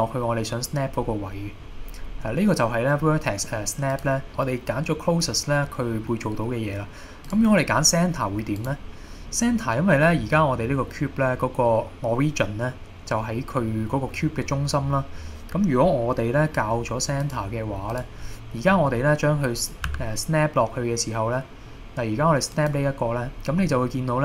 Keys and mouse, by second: 1.3-1.7 middle drag, 2.2 middle click, 4.0-7.7 drag, 8.6 click, 9.0-9.4 middle drag, 10.3 middle click, 11.6 middle click, 14.3 middle click, 17.3 click, 19.9 g, 22.6 click, 23.6-24.2 middle drag.